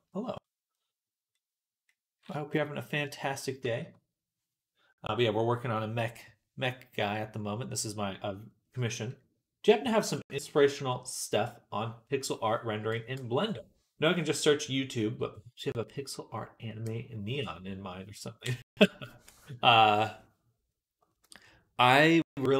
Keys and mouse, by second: 0.2-1.8 drag, 1.9 click, 2.4 shift+middle click, 3.4 shift+middle click, 3.7-5.0 middle drag, 5.3-7.3 middle drag.